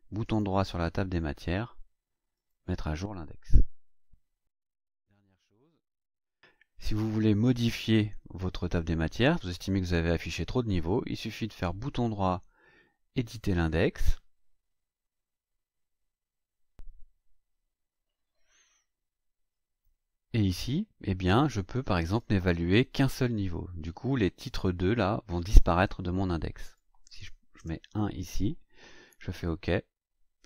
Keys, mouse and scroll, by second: 0.2 right click, 2.3 click, 5.5 right click, 13.2 click, 22.1-23.5 drag, 26.5 click, 27.5 BackSpace, 29.4 click.